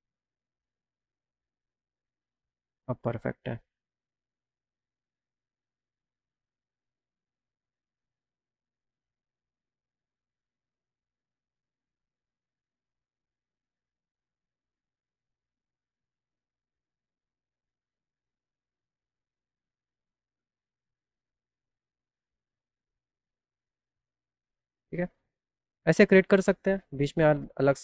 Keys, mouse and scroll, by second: 1.1-2.5 drag, 7.1 click, 8.3-10.1 drag, 13.5 click, 15.3 click, 16.4-17.8 drag, 21.3 right click, 21.7 right click.